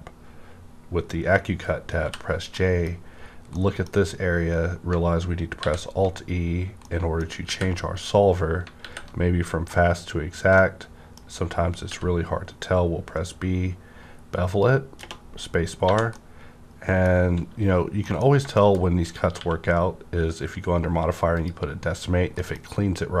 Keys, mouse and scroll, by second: 2.0 j, 2.0 -, 2.5 middle click, 2.9 scroll up 1, 3.5 middle click, 5.6 alt+e, 6.8-8.8 middle drag, 7.4 alt+e, 8.8 alt+e, 10.5-12.8 middle drag, 11.9 b, 12.8 scroll up 1, 14.4 click, 15.0 -, 15.4-15.8 scroll down 1, 15.8 1, 16.1 middle click, 16.1-18.2 middle drag, 16.1 1, 18.2 scroll up 1, 18.5 shift+middle click, 18.8-21.3 shift+scroll up 2, 21.3 click, 22.1 scroll down 1, 22.3 middle click, 22.9-23.2 scroll down 1.